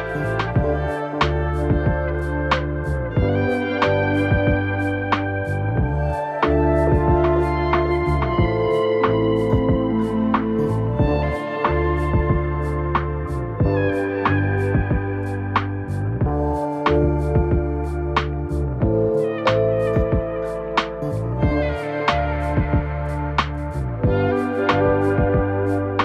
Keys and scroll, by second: 11.1 space.